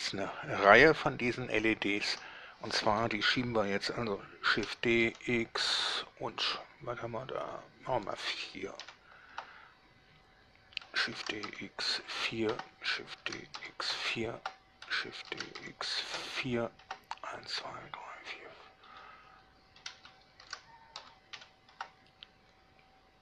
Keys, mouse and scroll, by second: 1.5-2.3 shift+middle drag, 4.7 shift+d, 5.2 x, 9.0 4, 9.5 Return, 11.3 shift+d, 11.6 x, 12.3 4, 12.7 Return, 13.3 shift+d, 13.7 x, 14.1 4, 14.5 Return, 15.3 shift+d, 15.8 x, 16.5 4, 17.0 Return, 19.1 shift+click, 20.6 d, 21.2 x, 21.5 4, 21.9 Return.